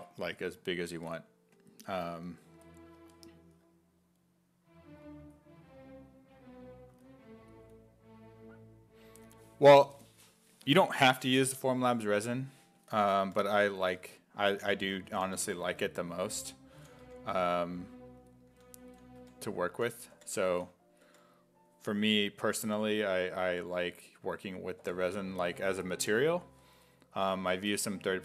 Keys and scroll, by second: 6.9 s, 12.7-17.1 typing, 18.6-21.0 typing, 24.8 5, 27.4 s.